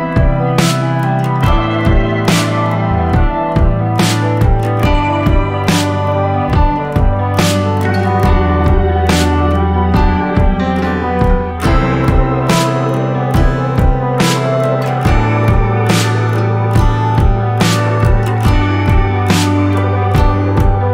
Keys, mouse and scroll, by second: 13.8 right click, 14.4 click, 15.2 scroll down 1, 15.6-20.9 drag.